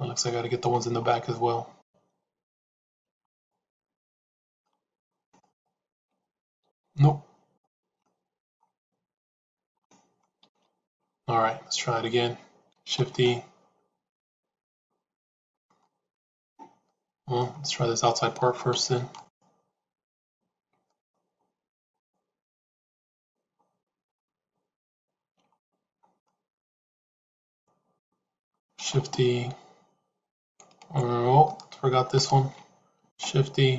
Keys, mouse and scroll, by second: 0.2 middle click, 4.5 middle click, 5.1 shift+a, 5.3 shift+click, 6.6 ctrl+z, 7.5 shift+click, 8.0 middle click, 9.3 shift+click, 9.7-10.7 middle drag, 10.6 shift+z, 15.7-17.3 middle drag, 19.1 alt+click, 20.6 shift+a, 26.2-27.9 middle drag, 28.7 shift+e, 32.0 shift+click, 32.9 shift+e.